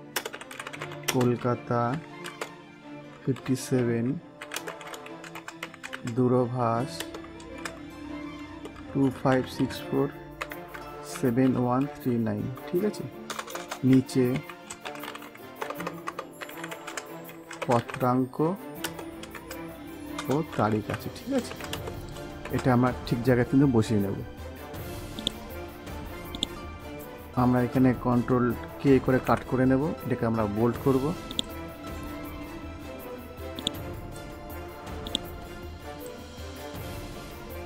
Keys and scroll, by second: 0.1 space, 4.5 space, 6.9 space, 8.4 space, 13.2 Return, 14.9 BackSpace, 17.7 BackSpace, 18.7 space, 20.1 Return, 21.6 space, 29.1 ctrl+k.